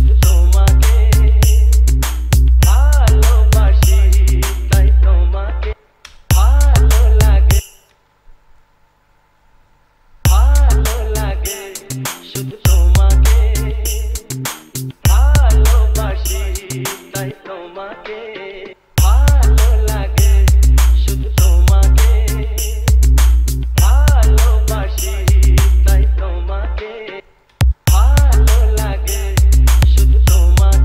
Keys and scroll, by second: 6.0 space, 10.4 space, 19.0 space, 27.4 space.